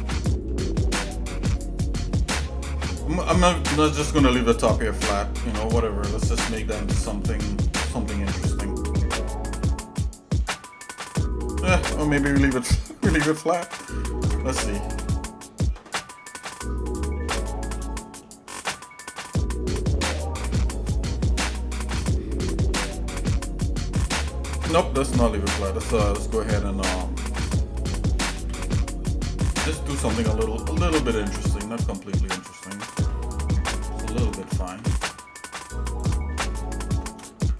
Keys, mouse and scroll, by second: 0.0 shift+middle click, 0.7 middle click, 1.3 shift+middle click, 2.3 middle click, 3.6 scroll up 1, 4.5 Tab, 5.5 Tab, 6.4 click, 6.9 Tab, 7.6 shift+middle click, 10.0 shift+middle click, 14.2 ctrl+Tab, 15.0 click, 17.0 click, 17.8 shift+middle click, 19.3 shift+middle click, 33.1 shift+middle click, 34.0 shift+middle click, 34.6 ctrl+Tab, 37.0 shift+middle click, 37.4 ctrl+Tab.